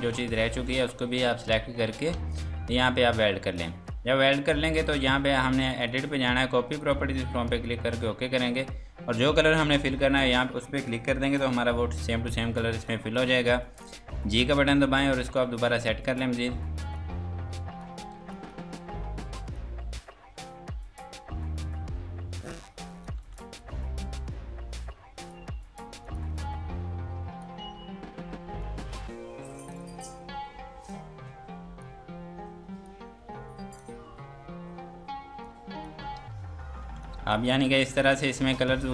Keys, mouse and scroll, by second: 0.9 Delete, 3.5 click, 4.1 Escape, 4.8 click, 10.8 click, 12.1-12.7 scroll down 1, 12.7 F2, 12.9 click, 14.2 g, 15.1 scroll down 1, 16.9 click, 18.1 F2, 18.3 click, 23.2 F2, 23.3 click, 36.2 ctrl+space, 36.5 scroll down 1, 36.8 F2, 37.0 click, 37.4 Escape, 37.7 click.